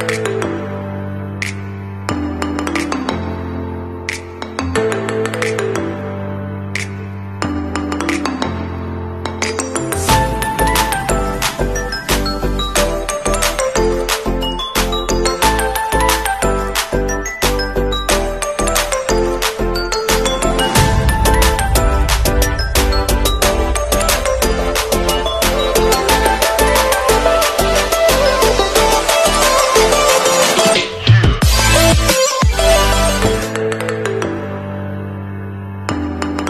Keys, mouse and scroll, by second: 3.7 ctrl+click, 12.9 alt+click, 13.8 click, 22.4 alt+scroll up 1, 23.5 alt+scroll down 1, 24.7 scroll down 1, 28.1 alt+scroll down 1, 30.5 alt+scroll up 1, 32.0 scroll up 1, 34.4-34.8 alt+scroll down 1.